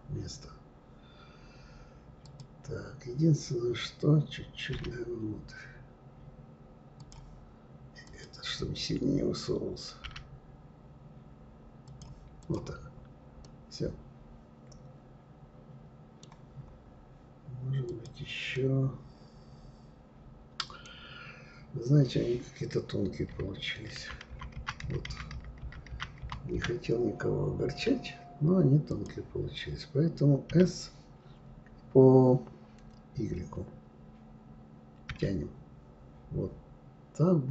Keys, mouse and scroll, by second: 0.2-0.8 scroll up 3, 2.2 click, 4.7 g, 8.0 click, 10.1 g, 12.4 click, 12.8-13.4 scroll down 2, 13.4-16.4 middle drag, 16.5-17.1 scroll up 3, 17.8 click, 18.5-20.8 middle drag, 20.8-21.6 scroll down 4, 21.6-22.2 scroll up 3, 22.2-24.0 scroll down 3, 24.0 scroll down 1, 24.1 ctrl+z, 24.4 ctrl+z, 24.7 ctrl+z, 24.8 ctrl+z, 25.2 ctrl+z, 25.3 ctrl+z, 25.6 ctrl+z, 25.9 ctrl+z, 28.9 click, 30.5 s.